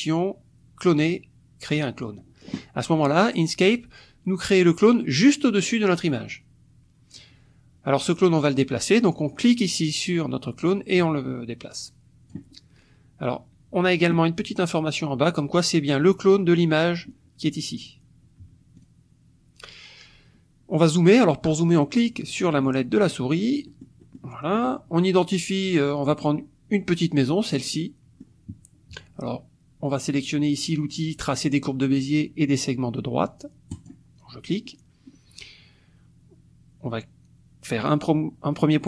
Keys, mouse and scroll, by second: 2.0 click, 5.7 click, 6.1 click, 9.4-12.5 drag, 17.8 click, 18.8 click, 21.9 click, 22.5-24.8 scroll up 4, 26.1 click, 27.7 click, 28.4 middle click, 33.7 click.